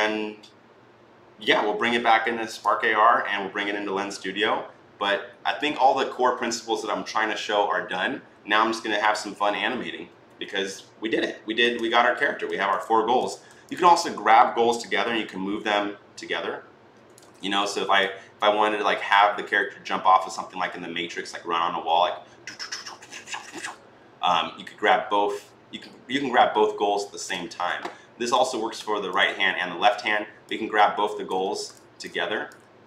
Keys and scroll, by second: 17.2 ctrl+z, 27.3 ctrl+z, 31.2 ctrl+z.